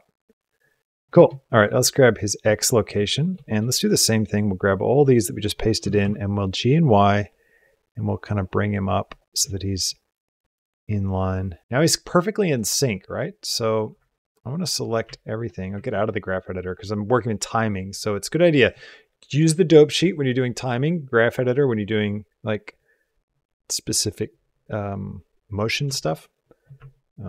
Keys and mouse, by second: 1.9 click, 2.5 shift+click, 3.3 shift+click, 3.6 click, 4.1-4.9 drag, 5.6 g, 9.7-12.4 drag, 13.8 a, 15.0 ctrl+middle click, 15.7 ctrl+Tab, 18.4 click, 26.4 shift+click, 26.7 ctrl+click.